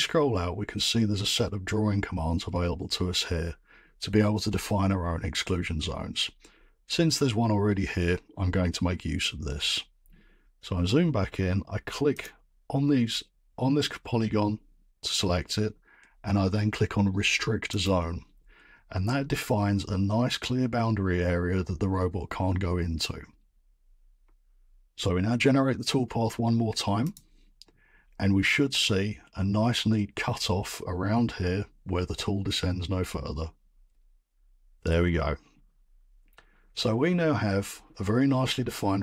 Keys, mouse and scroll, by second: 9.7-10.4 scroll, 10.4-10.9 scroll, 12.2 click, 12.2-12.9 scroll, 17.8 click, 21.0-22.8 drag, 27.1-32.2 drag, 36.3 middle click, 37.2 middle click, 37.4 scroll.